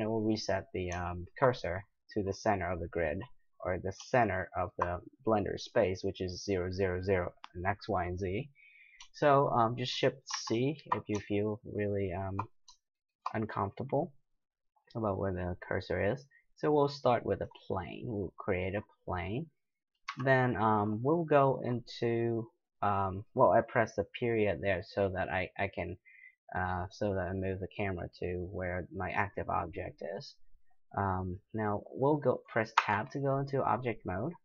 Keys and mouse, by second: 1.1-3.5 middle drag, 10.3 shift+c, 11.9-17.4 middle drag, 17.4 click, 18.3-20.1 middle drag, 20.1 KP_Decimal, 22.3-23.4 middle drag, 25.8-28.7 middle drag, 29.1 middle drag, 30.9 middle click, 32.8 Tab.